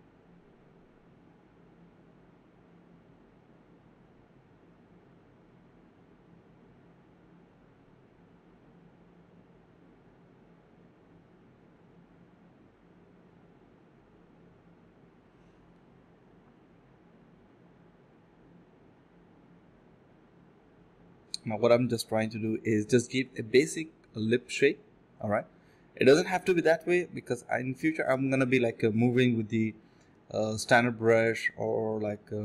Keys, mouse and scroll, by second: 0.5 right click, 1.9 ctrl+b, 3.2 double click, 3.5 alt+click, 3.7 alt+click, 3.9 alt+click, 5.4 alt+click, 6.4 ctrl+b, 7.4 typing, 7.7 double click, 8.8 alt+click, 9.4 typing, 11.3 alt+click, 11.5 alt+click, 12.5 f, 13.0 alt+click, 13.2 alt+click, 13.8 ctrl+b, 14.2 typing, 20.6-22.4 typing, 20.8 alt+click, 21.0 alt+click, 21.1 alt+double click, 22.4 alt+click, 22.8 alt+click, 24.7 alt+click, 25.3 alt+click, 25.6 alt+click, 26.2 ctrl+b, 26.5-27.2 typing, 28.5 typing, 30.7 alt+click, 31.0 alt+click, 32.3 alt+click.